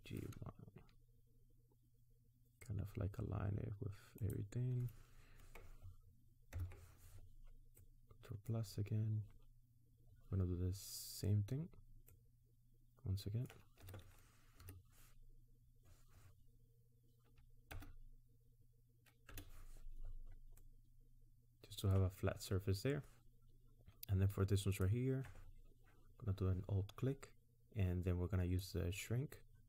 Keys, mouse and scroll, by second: 6.6 ctrl+KP_Add, 7.8 middle click, 12.1 middle click, 13.8 s, 20.6 middle click, 24.8 alt+click, 28.6 click.